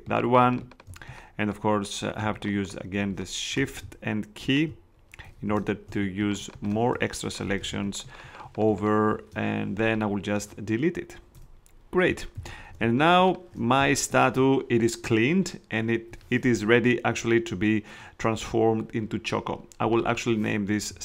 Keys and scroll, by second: 5.5 shift+space, 7.6 shift+space, 11.3 BackSpace, 12.4 super+d, 12.6 super+space, 13.4 space.